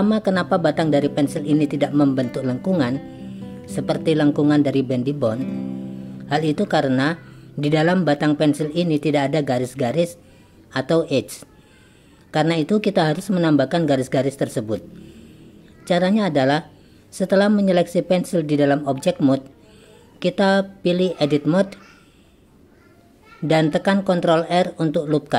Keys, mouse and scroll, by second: 15.8-16.6 drag, 18.2 click, 19.9-20.7 drag, 22.5 click, 24.5 click.